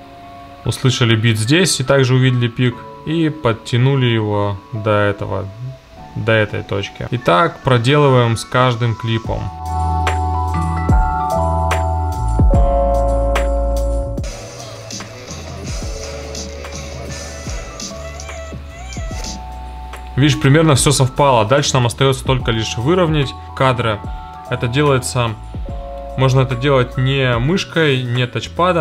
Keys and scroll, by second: 10.0 super+b, 10.2 BackSpace, 14.2 space, 19.3 space.